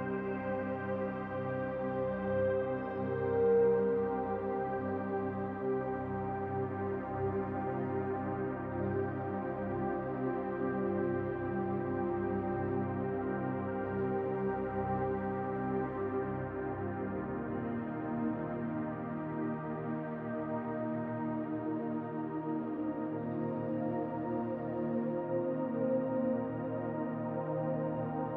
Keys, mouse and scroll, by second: 1.1 click, 5.0 s, 5.0 z, 10.7-13.9 drag, 25.8 e.